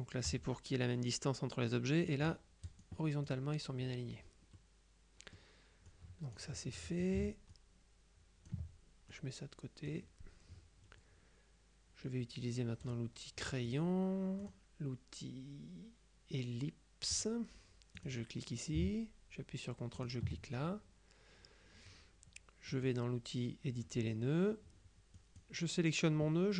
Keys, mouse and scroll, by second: 2.7 click, 4.7-5.9 drag, 6.5 click, 7.6-9.1 ctrl+drag, 9.2 click, 12.9 click, 13.8 click, 14.5 click, 17.2 click, 18.1 click, 20.1 ctrl+click, 22.8 click, 25.3 click.